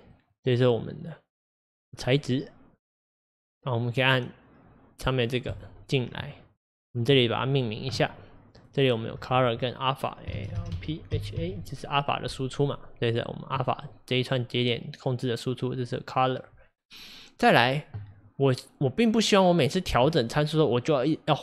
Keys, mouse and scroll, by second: 7.6-12.7 drag, 14.8-21.4 middle drag.